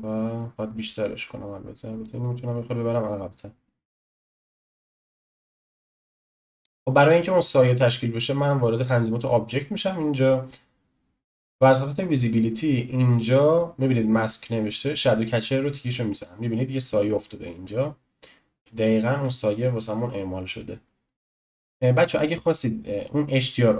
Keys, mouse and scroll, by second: 2.0 click, 6.6-7.8 scroll down 1, 7.8-8.8 scroll down 1, 8.8-9.5 drag, 9.5-11.6 scroll down 1, 11.6-12.0 drag, 12.0-15.3 scroll down 4, 15.3 click, 21.1 click.